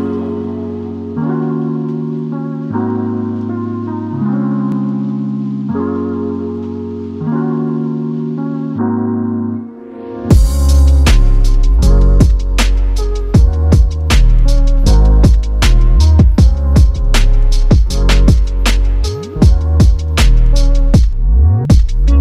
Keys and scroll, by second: 0.7-1.4 typing, 5.7 ctrl+d, 9.1 ctrl+d, 9.2 ctrl+d, 9.4 ctrl+d, 17.3 typing.